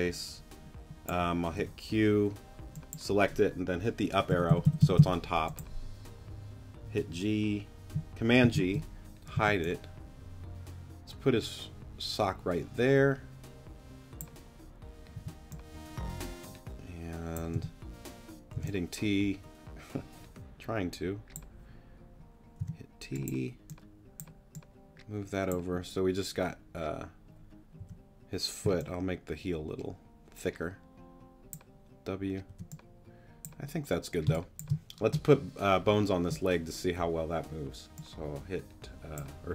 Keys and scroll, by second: 1.6 q, 4.0 Up, 8.4 super+g, 9.3 super+t, 15.1 t, 17.5 t, 22.6 t, 27.8 w, 32.5 w, 34.3 space.